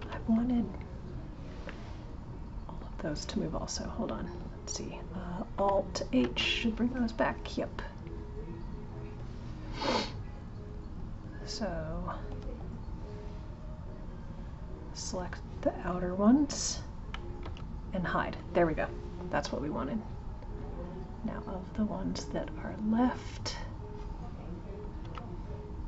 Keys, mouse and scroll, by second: 0.6 click, 1.7-4.7 middle drag, 6.2 alt+h, 8.7 click, 12.1 click, 13.2-16.2 drag, 20.6 click.